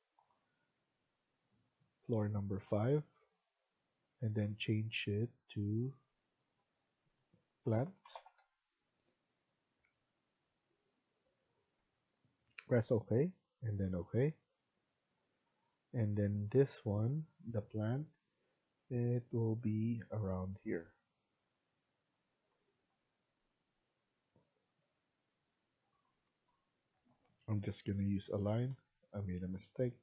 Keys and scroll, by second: 7.3-8.8 typing, 11.7 F1, 26.2-27.0 typing, 28.3 Escape, 28.6 Escape.